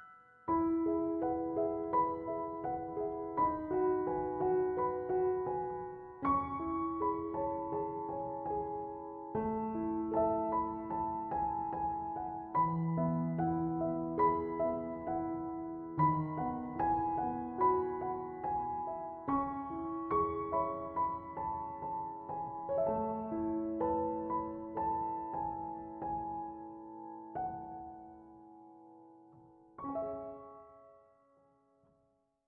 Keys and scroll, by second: 14.8 Escape.